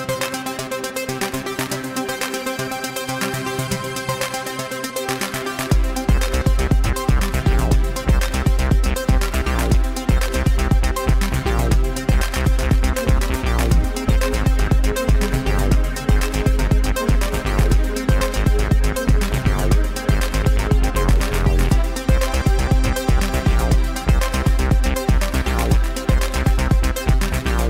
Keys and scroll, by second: 1.9 g, 2.2 g, 7.4 ctrl+r, 10.1 g, 13.7 g, 18.1-20.6 typing, 21.8 ctrl+r, 23.0 g, 23.8 g, 24.4 g, 26.7 g, 27.3 g.